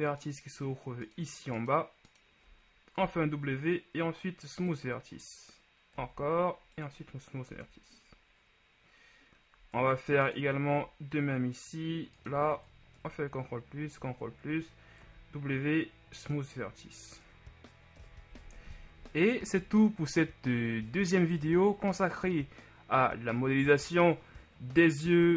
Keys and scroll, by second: 3.2 shift+w, 13.2 ctrl+shift+KP_Add, 13.9 ctrl+KP_Add, 15.2 w, 18.3 KP_1.